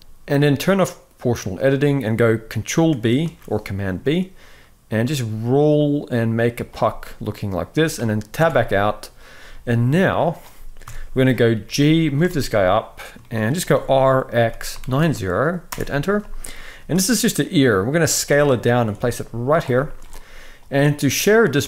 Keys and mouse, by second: 0.0 z, 1.2 click, 2.9 ctrl+b, 6.5-7.5 middle drag, 8.1 Tab, 9.1 z, 10.5 KP_1, 11.4 g, 12.0 shift+middle click, 12.9 shift+middle click, 13.4 r, 16.2 shift+middle click, 16.5 s, 17.9 g, 18.7 s, 19.5 shift+middle click.